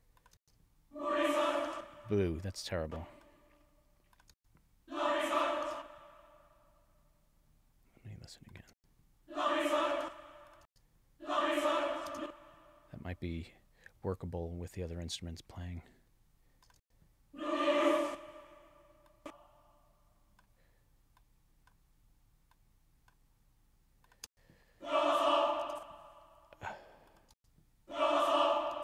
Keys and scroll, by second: 0.4 space, 1.7 space, 4.3 space, 5.6 space, 8.7 space, 10.5 space, 12.1 space, 16.8 space, 24.3 space, 25.6 space, 27.3 space, 28.7 space.